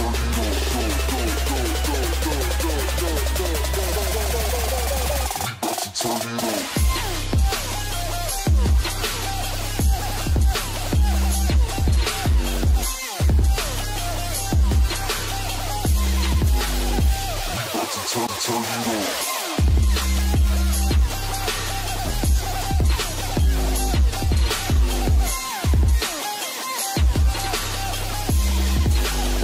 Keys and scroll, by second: 3.5 ctrl+space, 8.5 KP_5, 8.7 KP_0, 10.4 KP_6, 10.8 KP_0, 19.6 ctrl+space.